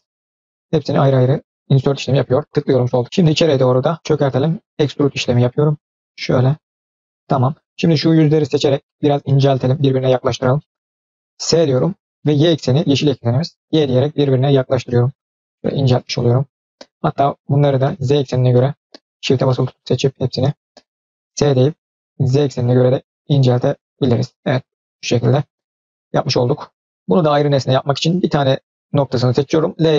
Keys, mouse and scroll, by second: 3.0 middle click, 3.3-3.8 scroll up 1, 3.9 shift+middle click, 4.5 e, 7.0-7.4 middle drag, 7.6-7.9 middle drag, 8.3-8.6 drag, 8.7 shift+click, 9.1-9.5 middle drag, 9.8 shift+click, 10.4-11.1 middle drag, 11.6 s, 16.4 scroll down 1, 17.0 click, 17.7 middle click, 18.0 click, 18.4 middle click, 19.0 shift+drag, 19.3-19.6 middle drag, 19.9 shift+drag, 20.2 shift+click, 20.8 middle click, 21.2 s, 24.1 middle click, 24.5 click, 24.8 middle click, 28.0 click, 29.6 l.